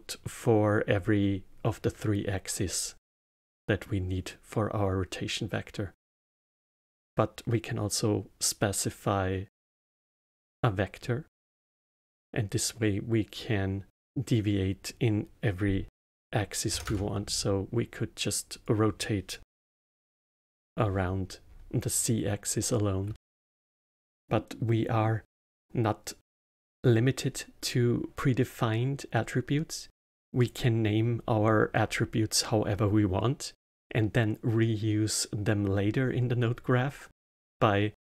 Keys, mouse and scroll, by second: 3.4-6.4 middle drag, 6.6-9.8 drag, 11.0-13.4 middle drag, 13.4-16.5 drag, 18.5-21.5 drag, 23.1-26.3 alt+middle drag, 30.3-33.5 drag.